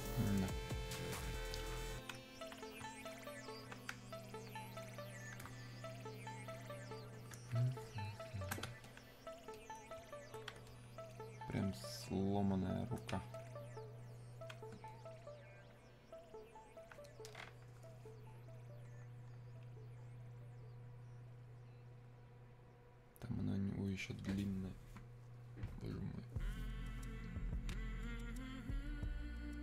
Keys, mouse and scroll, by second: 7.8 click, 8.9-14.9 alt+drag, 18.3-18.9 scroll down 1, 21.1-21.4 scroll up 1.